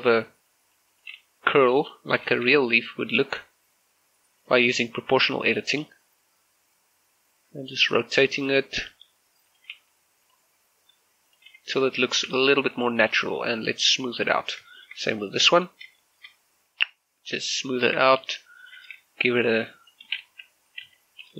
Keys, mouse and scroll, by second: 0.0-0.1 typing, 0.5 click, 1.0 right click, 1.2 r, 1.7 right click, 2.2 o, 3.3-4.5 scroll down 1, 4.5 right click, 5.9 r, 6.9-8.3 scroll down 1, 9.5 click, 9.8 g, 10.3 click, 11.0 r, 11.3 click, 11.5 g, 11.9 click, 12.1 Tab, 12.3 z, 12.5-14.0 middle drag, 14.0 click, 14.6 scroll down 1, 14.8 shift+middle click, 15.2 right click, 16.1 shift+middle click, 16.3-17.3 scroll up 1, 17.3 click, 17.7 shift+middle click, 18.0 Tab, 18.7 alt+right click, 19.5-20.9 drag, 20.9 ctrl+z.